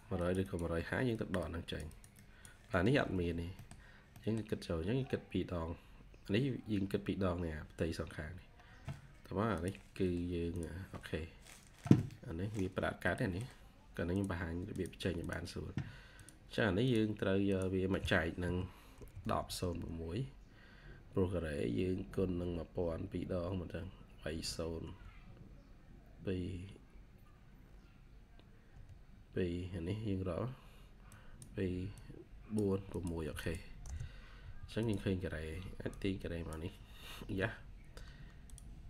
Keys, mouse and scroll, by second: 2.8 Escape, 3.0 Escape, 3.2 scroll down 1, 3.5 middle click, 4.1 middle click, 4.6-5.6 scroll up 1, 15.1 double click, 18.6-20.0 typing, 24.2-24.7 typing, 28.6 typing, 33.3 double click, 33.7 Return.